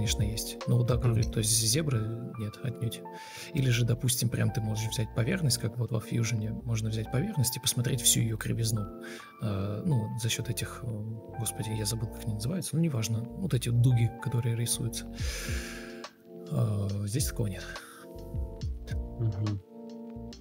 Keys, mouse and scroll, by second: 0.6 ctrl+space, 1.3 ctrl+click, 2.2 Escape, 2.4 Escape, 3.7 ctrl+click, 7.4 Escape, 8.7 ctrl+click, 12.6-13.5 typing, 13.6 Escape, 15.4 ctrl+click, 18.2 ctrl+e, 18.6 ctrl+space, 19.2 ctrl+space, 20.1 ctrl+d.